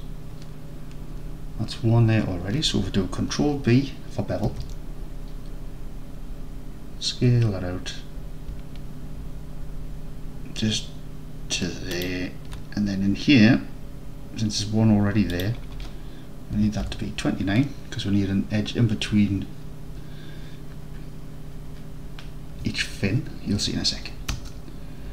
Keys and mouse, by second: 4.6 ctrl+b, 15.4-25.1 drag.